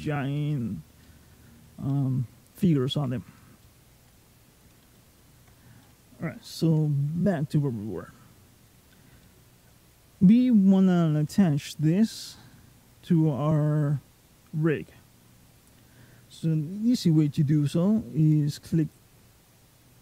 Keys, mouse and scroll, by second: 0.8 scroll up 1, 0.8 middle click, 1.5 scroll down 1, 1.7 middle click, 2.4-3.3 scroll up 2, 3.4 shift+middle click, 3.9 scroll down 1, 4.1-4.6 scroll up 1, 4.8 shift+middle click, 5.6 middle click, 8.4 click, 9.0 middle click, 18.0 click, 18.6 click.